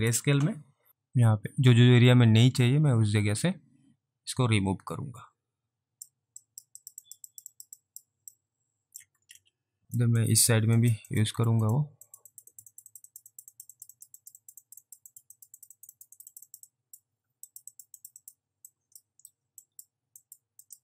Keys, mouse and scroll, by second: 0.9 click, 6.5 click, 7.1 double click, 7.4 click, 7.6 double click, 7.8 double click, 8.4 alt+click, 9.3 ctrl+z, 9.8 alt+click, 10.3 alt+click, 10.9 click, 11.1 double click, 11.4 click, 11.7 double click, 12.1 click, 12.4 double click, 12.6 click, 12.8 double click, 12.9 click, 13.1 double click, 13.4 click, 13.6 double click, 13.8 click, 14.0 double click, 14.2 click, 14.5 double click, 14.7 click, 14.7 typing, 14.9 double click, 14.9 alt+right click, 15.1 click, 15.4 double click, 15.6 click, 15.8 double click, 16.0 click, 16.2 double click, 16.3 double click, 16.5 double click, 16.7 double click, 17.5 click, 17.5 alt+right click, 17.8 double click, 18.0 click, 18.3 double click, 18.8 alt+click, 19.4 middle click, 19.4 ctrl+right click, 19.7 click, 20.3 click, 20.7 double click.